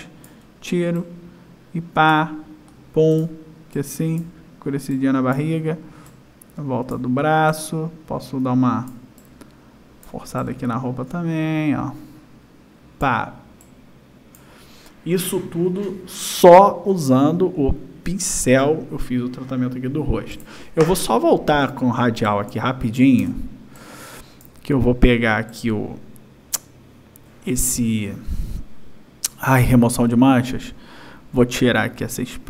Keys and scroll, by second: 22.5 space.